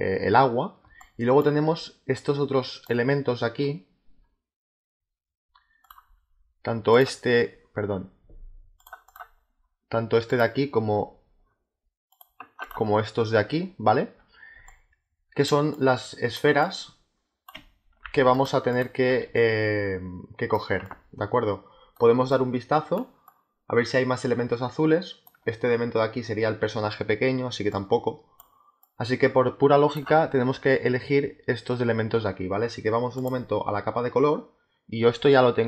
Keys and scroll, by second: 0.7 space, 14.4 space, 18.0 z, 19.2 space, 27.3 space.